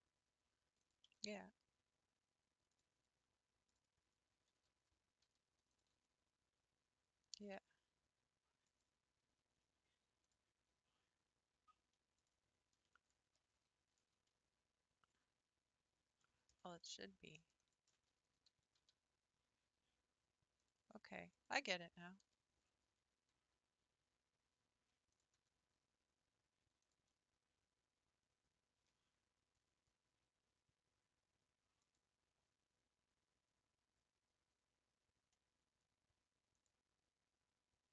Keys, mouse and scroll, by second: 1.1 g, 3.7 Left, 5.2 g, 5.9 r, 7.5 g, 9.5 r, 12.3 Left, 13.2 l, 14.0 r, 18.8 g, 21.4 Left, 22.2 l, 23.0 r, 25.3 g, 29.8 r.